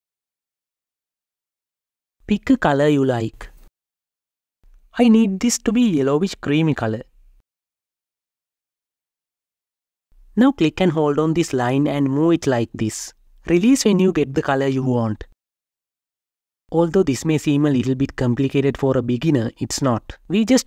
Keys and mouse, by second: 0.3-1.4 drag, 2.6-4.2 drag, 4.7 click, 6.3-10.7 drag, 11.5-12.6 drag, 13.3 click, 16.0-17.6 drag, 18.9-20.3 drag.